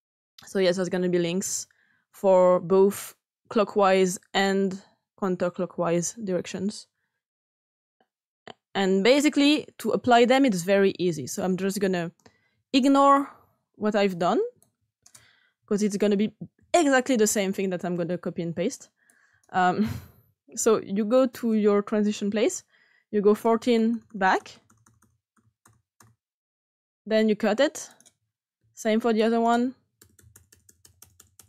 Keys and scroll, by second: 16.5 Delete, 23.3 Left, 23.6 Left, 23.7 Left, 23.8 Left, 24.0 Left, 24.1 Left, 24.3 Left, 24.5 Left, 24.6 Left, 24.8 Left, 25.0 Left, 25.3 Left, 25.6 Left, 25.9 Left, 26.8 Left, 28.5 s, 29.9 Right, 30.1 Right, 30.3 Right, 30.5 Right, 30.6 Right, 30.8 Right, 31.0 Right, 31.1 Right, 31.3 Right.